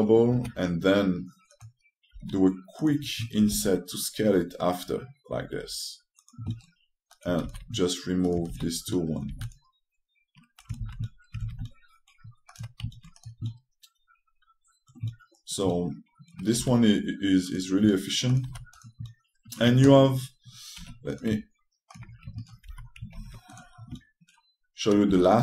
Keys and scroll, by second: 1.0 g, 2.8 q, 4.1 s, 8.1 r, 11.5 shift+space, 12.1 shift+space, 17.3 2, 19.2 3, 21.5 2, 24.8-25.4 typing.